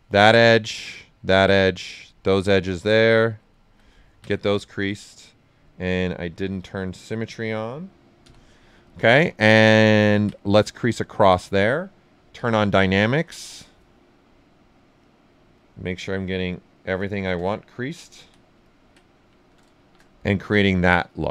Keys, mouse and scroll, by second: 2.3 right click, 3.1 click, 3.5 alt+right click, 5.3 click, 5.6 right click, 7.0 click, 8.2-9.1 typing, 8.5 right click, 8.9 alt+right click, 10.6 click, 10.9 typing, 11.0 ctrl+right click, 12.3 d, 15.0 click, 15.5 right click, 17.1 shift+d, 17.7 click, 18.1 d, 18.6 ctrl+right click, 19.0 right click, 19.8 shift+f, 20.0 right click.